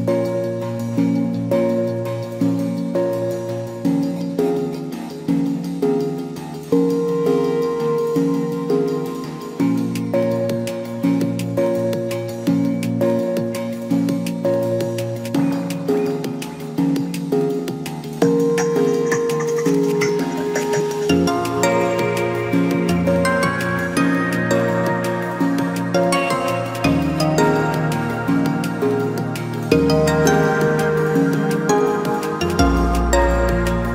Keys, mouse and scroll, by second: 1.8 middle click, 2.3 3, 2.5 click, 2.9 x, 3.7 middle click, 4.0 click, 4.5 KP_1, 4.8-5.2 scroll up 1, 5.2 g, 6.0-6.4 scroll down 1, 6.4 g, 7.7 s, 9.7 e, 11.3 KP_Add, 11.7 KP_3, 12.6 s, 14.1 s, 15.8-16.5 middle drag, 16.5 KP_1, 17.8 KP_3, 18.7 ctrl+r, 19.8 s, 21.3-22.4 middle drag, 22.4 KP_1, 22.9 scroll up 2, 23.0-24.7 scroll down 2, 25.5 ctrl+r, 27.0 KP_Decimal, 27.7 s, 29.6-30.5 drag, 30.5 s, 32.4-32.9 scroll down 7, 32.9-33.4 shift+middle drag, 33.4-33.9 scroll up 1.